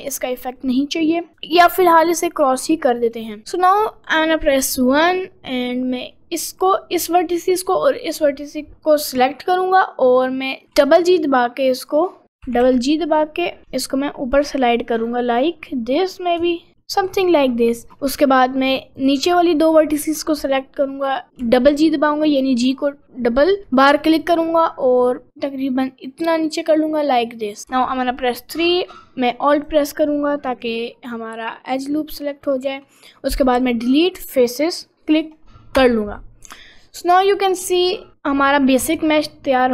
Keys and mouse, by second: 3.0 click, 4.7 1, 10.6 g, 12.5 t, 12.7 t, 13.6 g, 18.9 shift+click, 21.3 g, 27.7 3, 30.6 middle click, 31.1 middle click, 32.4 middle click, 33.6 Delete, 34.9 middle click, 35.8 Tab, 36.2-37.3 middle drag, 37.5 middle click, 38.8 Tab.